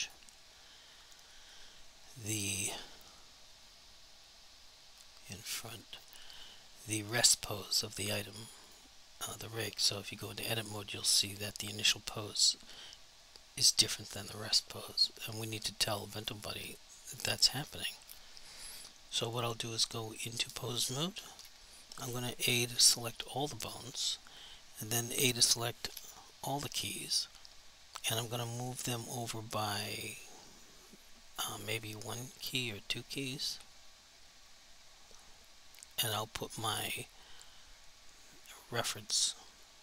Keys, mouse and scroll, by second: 0.1 click, 6.0 click, 8.7 click, 15.4 click, 21.4 1, 36.6 click.